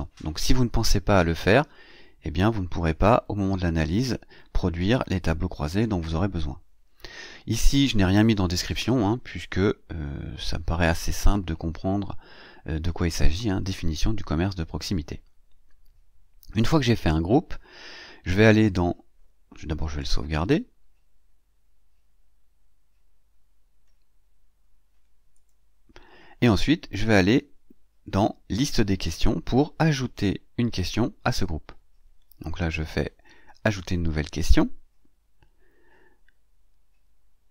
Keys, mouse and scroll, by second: 6.9 scroll down 2, 8.9-9.3 scroll down 2, 10.0 scroll up 2, 15.1 scroll up 2, 19.8 click, 25.2 click, 27.2 scroll down 1, 28.5 click, 33.5 click.